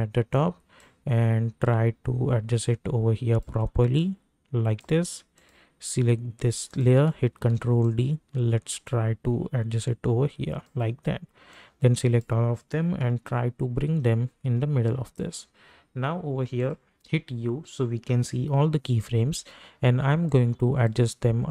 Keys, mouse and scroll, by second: 7.3 ctrl+d, 7.8-13.0 drag, 13.0 Right, 16.6 click, 17.0 u, 18.3 -, 18.5 -, 20.2-21.5 drag.